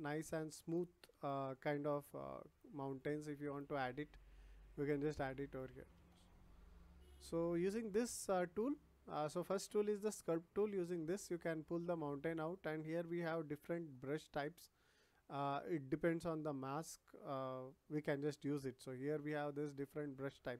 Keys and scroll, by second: 5.9 ctrl+z.